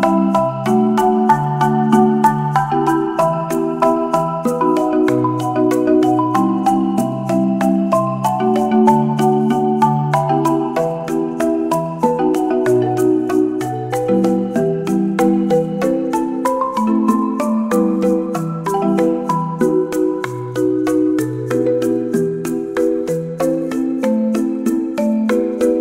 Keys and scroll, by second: 1.4 space, 6.9 space, 14.1 space.